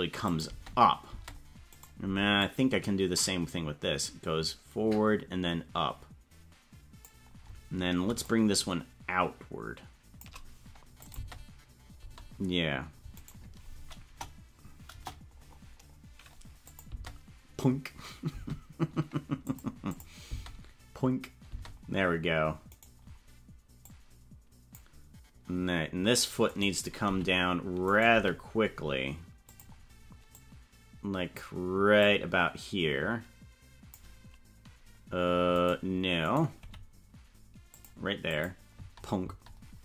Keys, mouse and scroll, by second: 0.0-1.1 typing, 0.2 click, 1.7 right click, 2.4-7.1 drag, 8.2-10.2 shift+drag, 11.0 click, 11.1 space, 12.1 space, 13.2 right click, 14.0 KP_0, 14.9 KP_0, 15.3-16.1 scroll down 9, 16.6 click, 16.8 space, 18.3 space, 19.4 click, 19.9 click, 20.2 space, 21.5 space, 22.8 right click, 23.8 click, 26.4 right click, 27.0 g, 27.8 right click, 28.1 g, 30.3-31.3 drag, 31.9-33.9 drag, 35.5 right click, 36.2 right click, 36.5 g, 38.3 click, 38.7 space, 39.2 space.